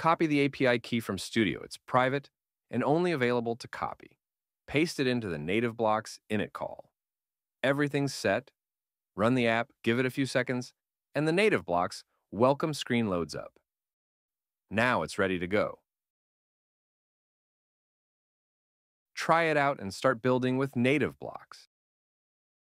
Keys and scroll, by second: 0.7 super+Tab, 2.5 BackSpace, 2.8 shift+", 3.2 super+v, 3.7 super+Left.